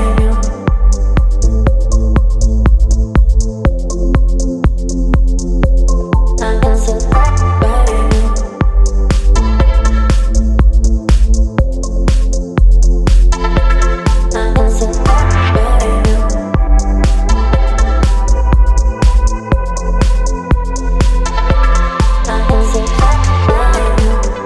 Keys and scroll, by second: 15.5 v, 17.7 space, 21.4 space.